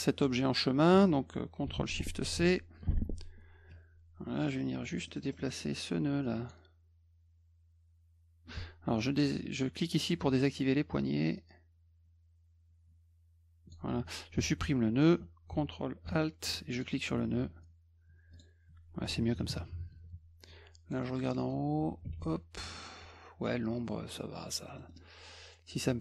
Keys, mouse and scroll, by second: 2.2 ctrl+shift+c, 3.7 click, 5.1 middle click, 5.2 middle click, 5.4 middle click, 6.2 click, 10.0 click, 11.4-13.7 drag, 16.7 ctrl+alt+click, 18.3 click, 19.1 F1, 20.9 middle click, 21.1 middle click, 21.2 middle click, 21.4 scroll up 2, 22.0 F2, 24.7 middle click, 24.9 middle click, 24.9 scroll up 1.